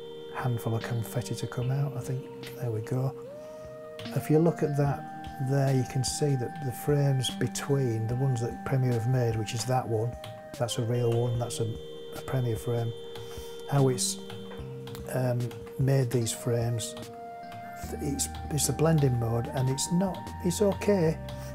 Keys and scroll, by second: 2.3 space, 4.0 Right, 5.2 Right, 10.2 Right, 13.1 Right.